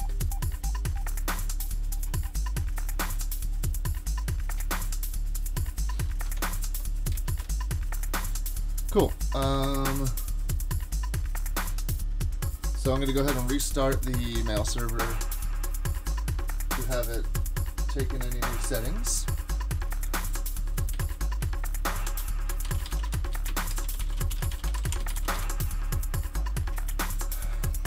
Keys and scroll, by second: 6.2 super+Tab, 6.7 super+Tab, 7.3 shift+super+Tab, 13.5 super+Tab, 14.3 super+Tab, 14.5 super+Tab, 20.9 shift+super+{, 22.1 ctrl+c, 22.4-25.9 typing.